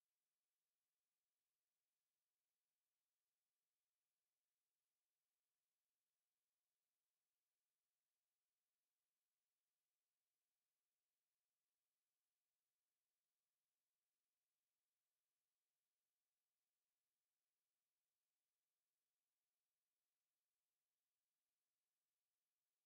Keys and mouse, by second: 0.6 alt+click, 1.2 alt+right click, 1.5 alt+click, 4.4 click, 6.4 alt+right click, 7.3 alt+click, 8.5 alt+click, 9.7 alt+click, 15.7 alt+click, 17.1 click, 17.5 alt+click, 20.0 click, 22.1 ctrl+z, 22.4 alt+click.